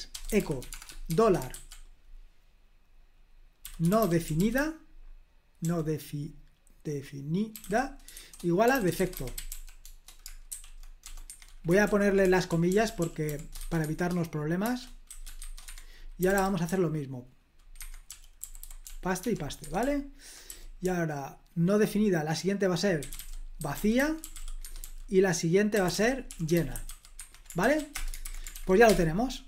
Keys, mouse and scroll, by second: 0.0-2.0 typing, 3.3-5.6 typing, 7.2-16.7 typing, 11.2 Escape, 15.6 Escape, 17.7 Escape, 17.8-28.0 typing, 28.2 super+h, 28.5 ctrl+p, 28.8 Return.